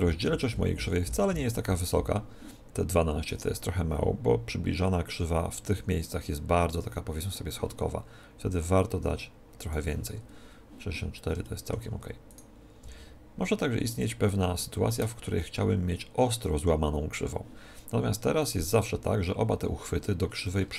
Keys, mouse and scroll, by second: 0.8-2.5 middle drag, 8.5-10.2 drag, 10.3 click, 11.3 middle click, 12.2-13.9 right drag, 12.7 r, 12.9 middle click, 13.9-15.6 drag, 13.9 middle click, 14.6-16.3 middle drag, 18.3-20.2 right drag, 20.2-20.7 middle drag, 20.2 scroll up 1.